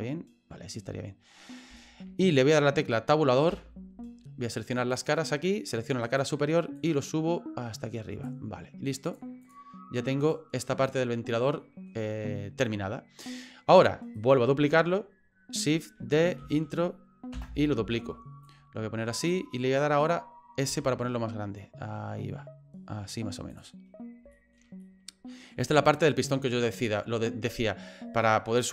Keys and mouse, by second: 1.9 shift+middle click, 3.5 Tab, 3.5-4.9 middle drag, 4.9 click, 6.0 right click, 6.8-8.3 drag, 9.1 click, 10.2 right click, 10.5-11.9 middle drag, 14.2 right click, 16.4 shift+d, 18.5 click, 19.6 middle click, 20.7 s, 24.4 shift+middle click, 24.8 middle click, 25.8 shift+middle click, 26.3 middle click.